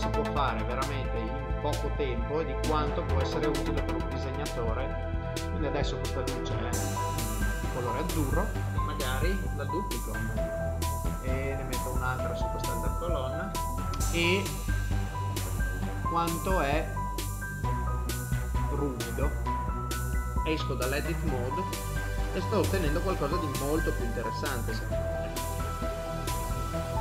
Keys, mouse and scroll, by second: 0.5 middle click, 10.3 shift+d, 13.5 shift+d, 19.7 middle click, 20.5 Tab, 21.1 middle click, 25.6 middle click.